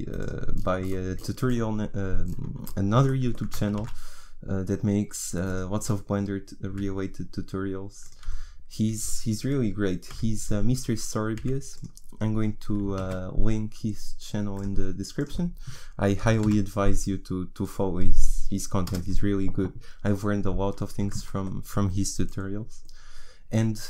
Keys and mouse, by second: 1.2-3.7 drag, 3.7 shift+a, 6.7 s, 10.1 Delete, 11.4 Delete, 13.0 shift+a, 15.1-17.2 drag, 21.1-23.8 drag.